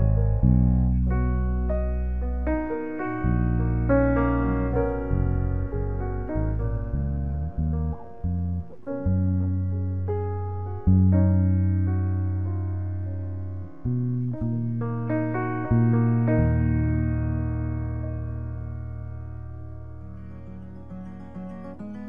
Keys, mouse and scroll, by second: 5.7-6.7 right drag, 7.0 ctrl+l, 8.1 z, 12.9 click, 19.9-20.6 middle drag.